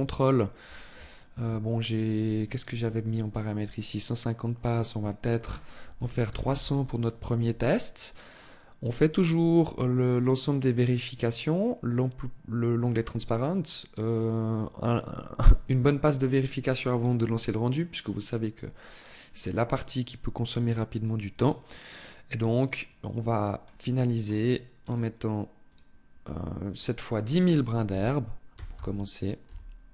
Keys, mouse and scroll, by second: 0.2-0.8 scroll down 3, 2.0 click, 9.4 click, 13.6 click, 18.7 click, 20.8 click, 23.8-24.2 scroll up 1, 24.4-25.4 scroll up 3, 25.4 click, 26.4 click.